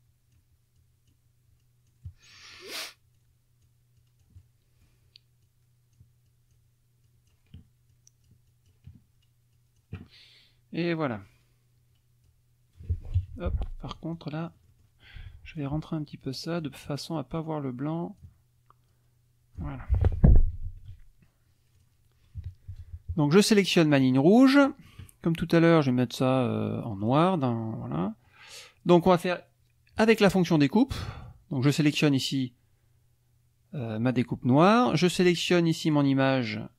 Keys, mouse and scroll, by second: 0.8 click, 1.6-2.7 drag, 2.1 right click, 3.1 click, 4.0-5.0 drag, 5.4 click, 6.3 click, 7.1 click, 7.9 click, 9.5 click, 11.2-12.5 drag, 13.2 KP_Subtract, 14.4 middle click, 15.2 F2, 15.5 click, 16.4 click, 17.1-18.4 drag, 18.9 click, 19.8 F1, 20.2 KP_Subtract, 21.8 click, 22.4 KP_Subtract, 23.9 click, 24.3 middle click, 24.4 click, 27.0 click, 28.3 click, 30.5 click, 31.1 click, 35.8 shift+click.